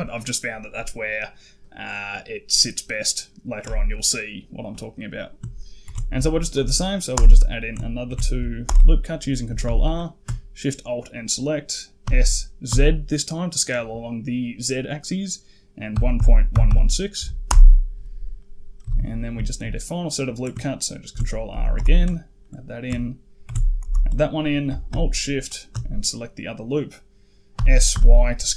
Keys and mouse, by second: 5.7 ctrl+r, 7.9 ctrl+r, 9.8 alt+shift+click, 11.9 s, 18.2 middle click, 18.7 a, 18.8 a, 19.0 middle click, 19.3 shift+middle click, 19.6 click, 21.0 ctrl+r, 22.3 click, 23.3 ctrl+r, 26.2 middle click, 27.4 s.